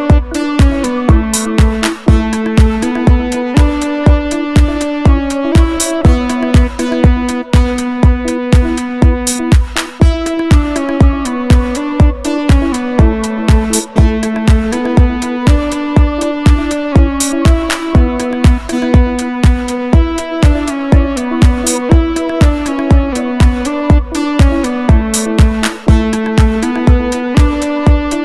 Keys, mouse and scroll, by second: 4.0 click, 6.8-7.7 drag, 9.2 click, 10.3 click, 11.3 click, 12.2 click, 13.0-13.6 drag, 14.0 click, 15.1 click, 16.7 click, 18.2 click, 19.2 click, 21.2 click, 22.1 BackSpace, 22.5 Return, 25.6 ctrl+scroll up 2, 26.5 click, 27.2 ctrl+scroll up 2, 27.7-28.1 ctrl+scroll down 3.